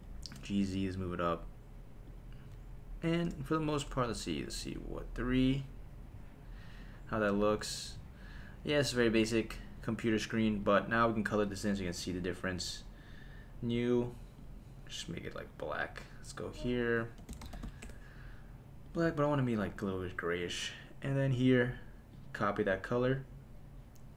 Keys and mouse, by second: 0.3 z, 2.1 click, 4.1 KP_1, 4.6 KP_3, 6.0 middle click, 6.8 click, 8.0 middle click, 9.7 click, 10.6 click, 11.9 click, 12.9-13.7 drag, 14.4 click, 16.6-17.8 drag, 18.9-21.1 drag, 22.1-23.2 drag.